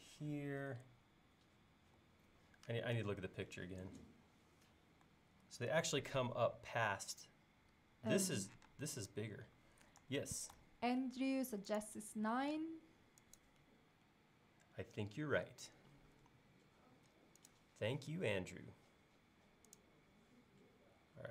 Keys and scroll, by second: 3.0 super+Tab, 5.5 super+Tab, 8.7 space, 10.2 super+z, 12.5 m, 14.1 Up.